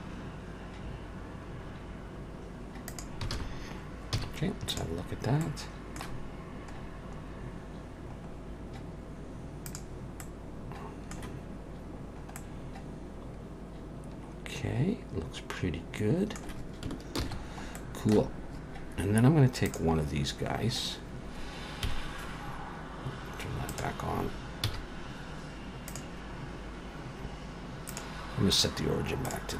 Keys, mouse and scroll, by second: 3.3 alt+a, 4.1 z, 5.1-5.9 scroll down 2, 5.4 middle click, 6.8-7.2 scroll down 1, 7.2-7.8 scroll up 1, 7.8-8.2 scroll down 1, 8.2-8.9 scroll down 4, 9.7 click, 10.2 middle click, 11.6-12.4 scroll up 3, 12.4 middle click, 17.2 ctrl+s, 17.4-18.3 scroll down 4, 17.8 middle click, 18.3-19.6 scroll up 3, 19.7 click, 21.9 KP_1, 23.7 click, 24.7 z, 27.9 click.